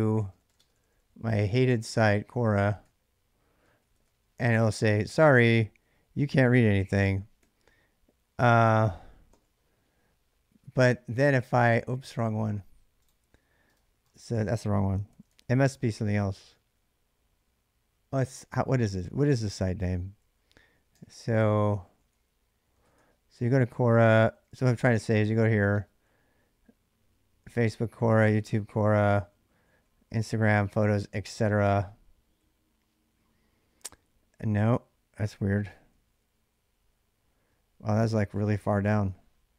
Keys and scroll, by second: 0.0-4.3 typing, 6.9-9.1 typing, 14.9 ctrl+c, 15.2 ctrl+[, 15.3 k, 15.8-16.2 l, 18.1 l, 20.0-25.5 typing, 28.3-30.5 typing, 31.9-32.7 typing, 35.3-36.0 typing.